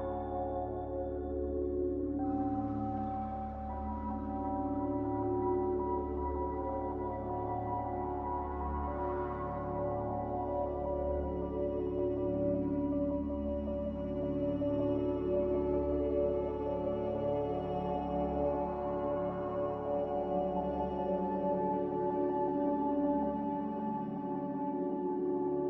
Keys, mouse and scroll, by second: 0.0-1.3 typing, 7.3-9.9 typing, 11.8-13.8 typing, 18.1 z, 22.9 b.